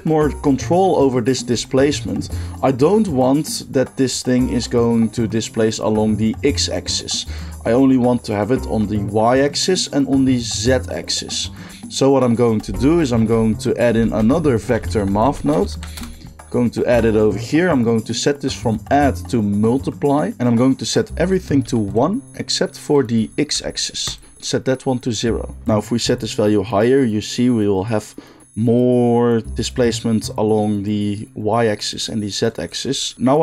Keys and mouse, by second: 12.3 click, 12.4 middle drag, 13.1 shift+a, 14.0 shift+a, 18.6-20.3 drag, 21.1 click, 21.9 middle click, 22.8-24.1 drag, 24.1-25.6 middle drag, 25.6-32.7 drag, 32.7-33.4 middle drag.